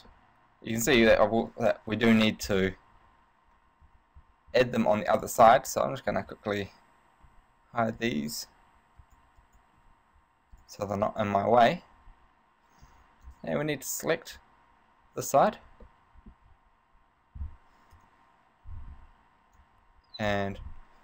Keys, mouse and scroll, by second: 0.3 middle click, 1.2 scroll down 2, 1.8 KP_1, 4.0 a, 4.4 a, 4.7 a, 5.3 right click, 5.8 right click, 7.4 h, 8.2 right click, 8.4 h, 9.2 right click, 9.5 right click, 10.0 h, 10.8 right click, 11.3 right click, 11.8 h, 13.0 b, 16.1 middle click, 18.1 KP_3, 19.1 b.